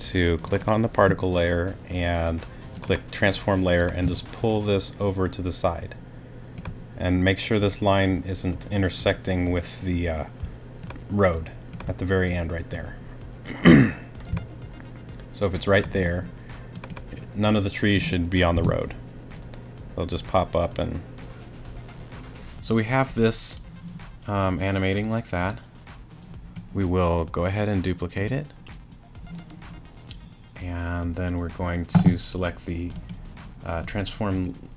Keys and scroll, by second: 18.5 space.